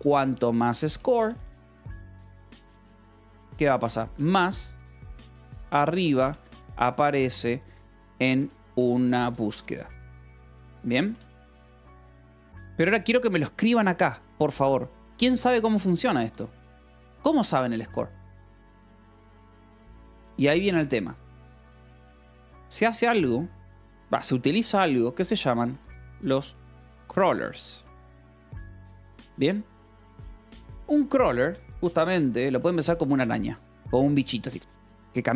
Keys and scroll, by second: 0.3-12.4 typing, 16.7 shift+v, 20.0 Escape, 21.1 o, 21.4 Return, 22.3 space, 25.2-28.8 typing, 30.0 h, 31.1 r, 31.9 Escape, 32.1 l, 33.1 space.